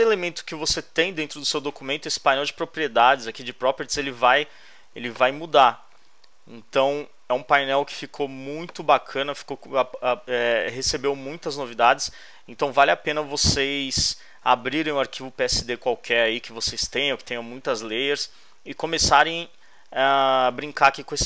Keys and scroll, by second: 4.8 space.